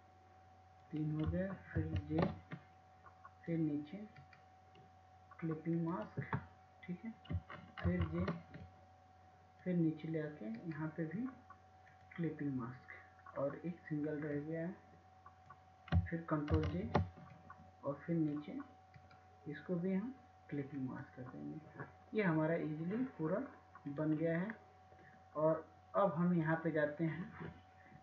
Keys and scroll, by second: 6.0 ctrl+j, 12.2 ctrl+j, 21.0 ctrl+j.